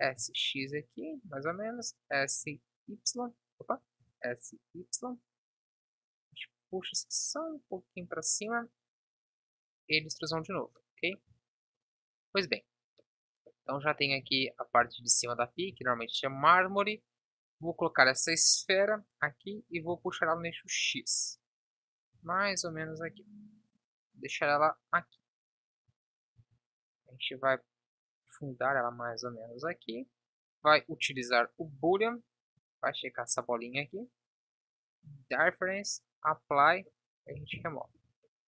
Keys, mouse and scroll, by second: 3.7 s, 5.4 KP_1, 8.7 e, 11.3 Tab, 13.2-14.2 middle drag, 14.2 KP_7, 15.8 shift+a, 18.0 s, 19.5 s, 22.1 g, 25.8 KP_1, 26.3 z, 37.3 Delete.